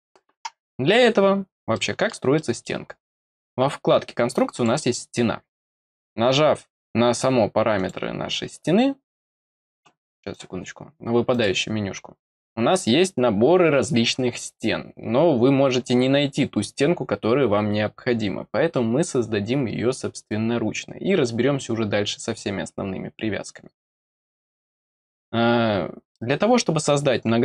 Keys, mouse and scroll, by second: 1.7 middle click, 2.3 middle click, 4.5 click, 7.7 click, 10.2 click, 11.2 click, 13.1-15.0 scroll down 4, 15.2 scroll down 2, 18.6-19.6 scroll up 4, 19.7 scroll up 2, 20.0 middle click, 24.1 click.